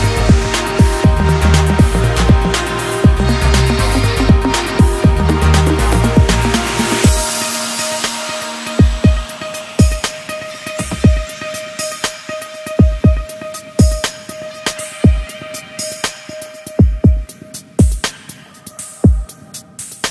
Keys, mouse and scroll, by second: 1.8 shift+click, 3.6 shift+click, 5.3 shift+click, 5.6 shift+click, 8.3 click, 9.8-12.2 drag, 12.2 Tab, 13.7-16.8 middle drag.